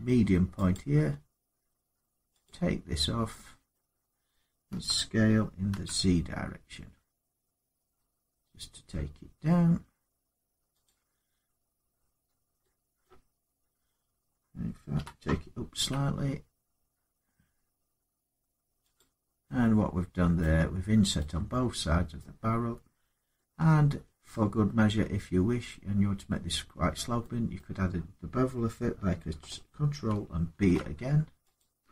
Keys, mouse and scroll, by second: 0.5 click, 3.0 scroll down 1, 3.5 middle click, 4.5 s, 5.5 z, 10.6 click, 12.0-12.6 scroll down 3, 12.6 scroll up 3, 12.6 shift+scroll down 2, 12.8 shift+middle click, 12.8 shift+scroll up 1, 13.1 scroll down 1, 13.1 scroll up 2, 15.0-15.5 scroll, 15.8 typing, 18.5-19.2 typing, 18.7 click, 20.2 middle click, 21.9 middle click, 26.5 middle click, 30.3 ctrl+b, 31.3 click.